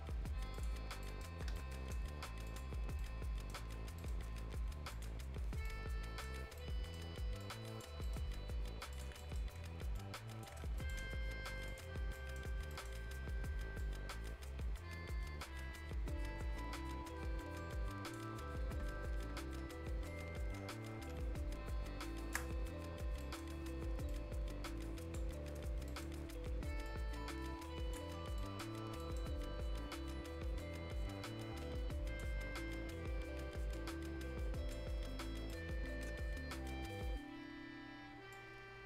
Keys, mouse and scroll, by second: 0.5 click, 0.9 scroll down 1, 1.0 right click, 1.3 Escape, 1.6 right click, 2.5 click, 2.8 scroll down 1, 3.0 right click, 3.9 scroll up 1, 4.0 right click, 4.9 click, 5.3 scroll down 1, 5.7 right click, 6.3 scroll up 1, 6.6 right click, 7.4 click, 8.0 right click, 8.9 click, 9.2 right click, 10.0 ctrl+shift+click, 10.7 shift+scroll down 1, 10.8 shift+right click, 11.7 shift+click, 12.0 shift+scroll down 1, 12.2 shift+right click, 12.5-13.6 shift+scroll up 2, 12.7 shift+right click, 12.7 shift+right click, 13.8-19.0 shift+drag, 19.0-19.4 shift+scroll up 1, 20.1-22.8 shift+drag, 22.8 scroll up 1, 23.2 right click, 24.1-25.4 drag, 25.4 scroll down 1, 25.9 right click, 26.9-28.2 shift+drag, 28.2 scroll down 1, 28.4 right click, 28.8 scroll up 1, 29.0 right click, 30.6-35.5 drag, 35.5 right click, 36.4 scroll down 1, 36.5 right click, 36.9-37.4 scroll up 1, 38.3-38.8 drag.